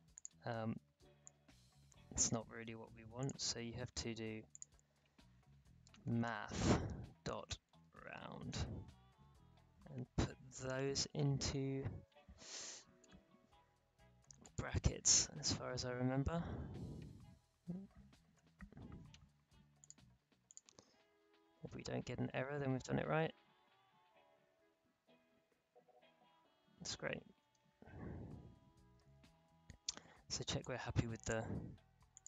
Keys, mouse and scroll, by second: 0.1-3.2 drag, 5.6-9.0 typing, 10.6 shift+9, 12.6 Right, 14.4 click, 16.5 0, 18.3 shift+0, 19.8 click, 21.5 space, 27.4 space, 28.0-28.6 alt+scroll down 2, 28.6-29.1 alt+scroll down 1, 29.2-29.9 alt+scroll up 2, 29.9-30.6 scroll up 1, 30.6-32.1 drag.